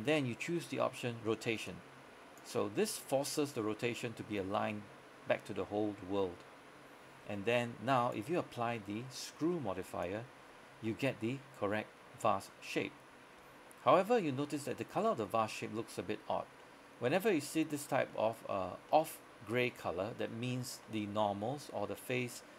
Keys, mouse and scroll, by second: 1.8 click, 10.9-13.5 middle drag, 13.5 scroll down 1, 13.6 scroll up 1, 14.0 middle click, 14.4 scroll up 1, 14.6 middle click, 15.4 scroll down 1, 15.6 middle click, 16.5 scroll down 1, 16.7 middle click, 18.0 scroll down 1, 18.2 middle click, 18.7 scroll up 1, 19.0 middle click, 20.7 scroll down 1, 20.9 middle click.